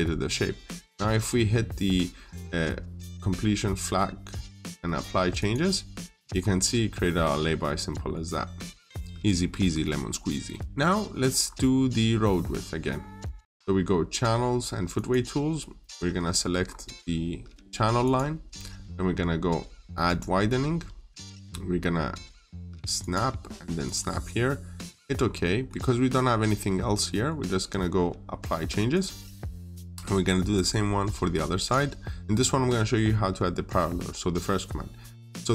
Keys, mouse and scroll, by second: 6.2-7.4 scroll down 1, 7.7 middle click, 9.5 scroll down 1, 9.7 middle click, 10.0-10.3 scroll down 1, 10.3 middle click, 10.9-11.2 scroll up 1, 12.4 middle click, 14.8 click, 16.4-17.8 scroll up 1, 17.9 click, 20.8-22.8 scroll up 1, 22.8 click, 25.0 scroll down 1, 25.2 middle click, 26.7 scroll down 1, 26.9 middle click, 28.7 click, 29.3 scroll down 1, 29.3 middle click, 30.3 click, 32.2-34.6 scroll down 1.